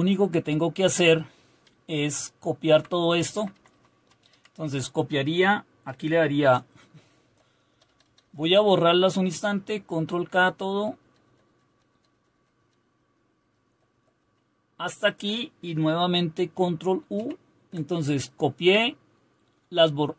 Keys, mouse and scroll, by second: 1.7-2.6 Down, 3.3 Up, 3.5 Up, 3.7 Up, 3.9 Up, 4.3 Down, 7.2 ctrl+k, 7.7 ctrl+k, 8.0 ctrl+k, 8.2 ctrl+k, 8.6 ctrl+k, 8.8 ctrl+k, 8.9 ctrl+k, 9.1 ctrl+k, 9.3 ctrl+k, 9.5 ctrl+k, 9.7 ctrl+k, 9.9 ctrl+k, 10.2 ctrl+k, 10.7 ctrl+k, 11.0 ctrl+k, 11.2 ctrl+k, 11.7 ctrl+k, 11.9 ctrl+k, 12.1 ctrl+k, 12.3 ctrl+k, 12.6 ctrl+k, 13.4 ctrl+k, 13.6 ctrl+k, 13.9 ctrl+k, 17.1 ctrl+u.